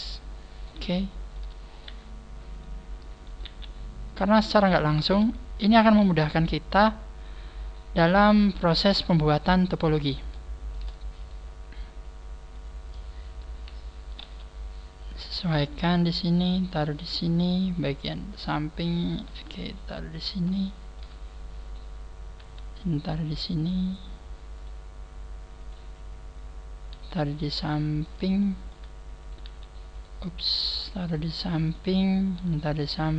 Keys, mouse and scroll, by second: 0.6 click, 1.0 shift+middle click, 1.1 shift+middle click, 1.8 right click, 2.6 click, 3.3 right click, 3.4 e, 4.3 click, 4.7 shift+middle click, 5.6 right click, 6.0 e, 6.8 click, 8.0-8.4 scroll down 4, 8.9-9.8 scroll up 10, 10.4 scroll up 10, 11.2 right click, 12.0 click, 12.8 right click, 14.2 g, 15.4 click, 15.4 right click, 15.6 g, 16.6 click, 18.4 right click, 19.2 g, 20.2 click, 20.6 shift+middle click, 21.6 right click, 22.4 g, 24.6 right click, 26.9 g, 28.4 click, 28.4 shift+middle click, 29.2 right click, 29.4 g, 30.0 right click, 30.4 right click, 30.6 g, 31.6 click, 32.2 right click, 32.4 g.